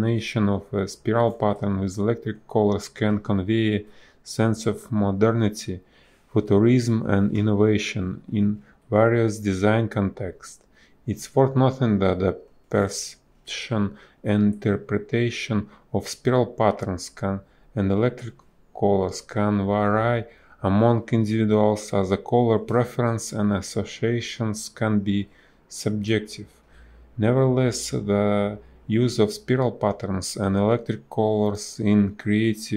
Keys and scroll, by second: 1.0 space, 3.9 space, 6.7 space, 9.1 space, 11.9 space, 14.9 space, 15.2 b, 15.4 space, 17.8 space, 20.3 space, 28.5 space, 29.5 ctrl+z, 30.5 space, 31.6 space.